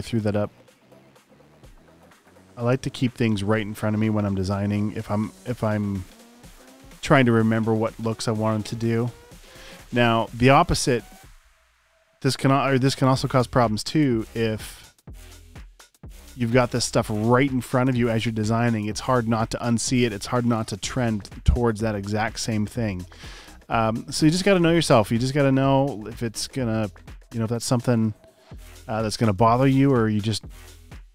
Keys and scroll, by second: 3.8 super+v, 6.4 e, 17.4 space, 29.4 space, 29.9 space, 30.7 space.